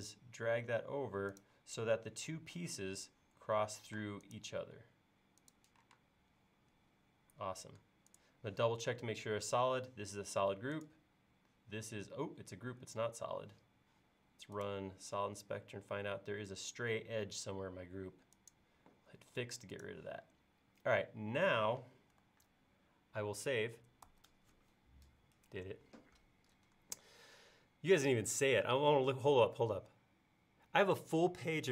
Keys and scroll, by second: 3.9 m, 6.0 space, 24.1 super+s.